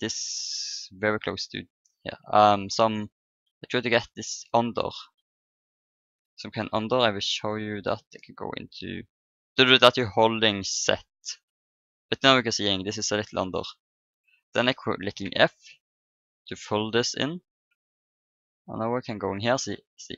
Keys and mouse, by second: 1.7-6.7 middle drag, 6.7 KP_1, 8.0 z, 12.8-15.5 drag, 15.2 f, 16.6 x, 17.3 x, 18.8-20.1 drag, 19.4-20.1 middle drag, 19.4 right click.